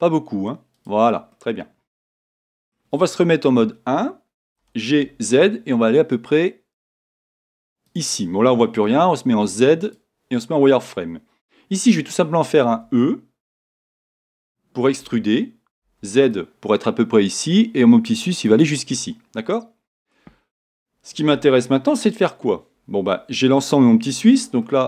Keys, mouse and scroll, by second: 0.8 click, 1.3-24.8 middle drag, 4.2 KP_1, 4.6 g, 7.9 click, 8.9 z, 14.6 e, 18.6 click, 20.5-24.5 scroll up 2, 24.5 scroll up 1.